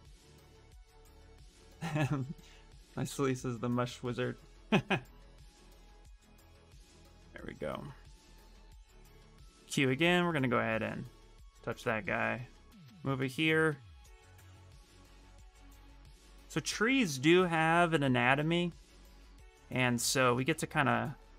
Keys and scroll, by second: 9.1 q, 11.5 w, 14.1 q, 17.1 w.